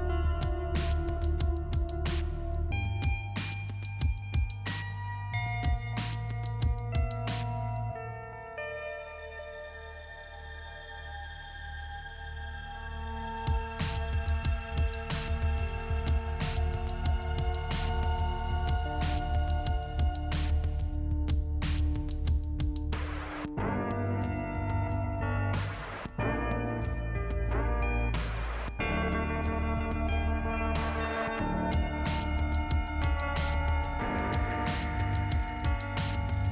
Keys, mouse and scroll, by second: 0.2 t, 1.5-2.6 scroll up 2, 3.2 middle click, 4.0 click, 4.1 click, 5.4 click, 5.5 click, 7.9 click, 8.1 click, 9.0 click, 9.1 click, 10.4 click, 12.1 click, 12.1 click, 14.7 click, 18.8 right click, 19.0 right click, 19.7 p, 19.9 scroll down 2, 20.0 right click, 23.1 click, 25.7 middle click, 26.9 t, 27.7-28.0 scroll up 1, 28.5 click, 32.0 click, 33.0 click, 35.5 click.